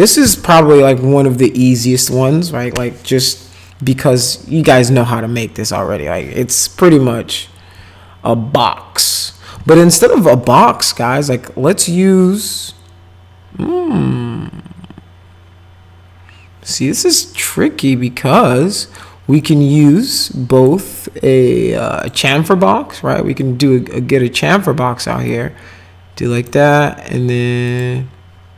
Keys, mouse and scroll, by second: 19.4 click, 20.6 click, 22.0 click, 23.4-25.3 drag, 26.4 click, 27.7 click.